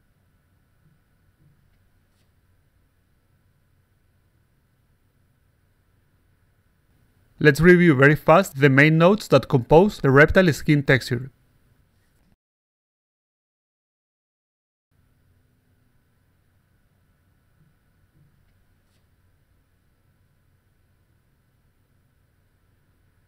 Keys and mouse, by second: 0.1 click, 0.9 click, 1.9 click, 2.6 click, 3.6 click, 4.8 click, 5.7-6.4 alt+drag, 7.8 click, 7.9 click, 8.8 click, 8.9 click, 9.8 click, 9.9 click, 10.8 click, 10.9 click, 13.2 click, 14.7 click, 15.1 click, 15.6 click, 17.1 click, 17.2 click, 18.7 click, 19.5 click, 19.6 click, 20.3 click, 20.5 click, 21.1 click, 21.2 click, 21.8 click, 22.0 click.